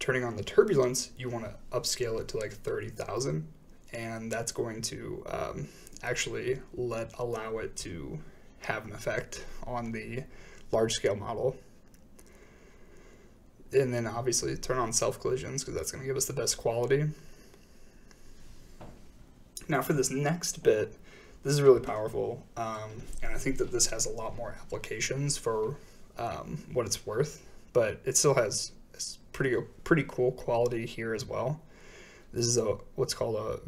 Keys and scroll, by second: 2.3 5, 2.4 Return, 5.5-7.2 typing.